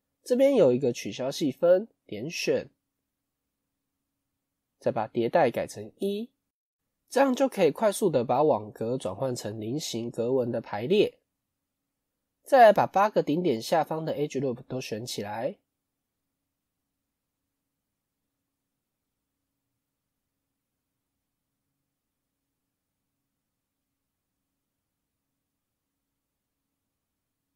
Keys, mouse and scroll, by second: 3.2-5.2 middle drag, 5.2 click, 5.9-7.1 middle drag, 7.1-8.9 scroll up 1, 8.9-10.8 middle drag, 10.8 KP_1, 11.9 click, 12.3 middle click, 12.7-14.6 scroll down 1, 15.2 middle click, 15.7-16.5 scroll up 2, 16.5 alt+shift+click, 17.4-18.7 middle drag, 18.7 alt+shift+click, 19.1 middle click, 19.7-20.2 scroll up 1, 20.2 alt+shift+click, 20.6 scroll down 1, 20.8 middle click, 21.3 scroll up 3, 22.2 alt+shift+click, 22.6-23.6 middle drag, 23.6 alt+shift+click, 24.0-25.3 middle drag, 25.3 alt+shift+click, 25.7-27.5 middle drag.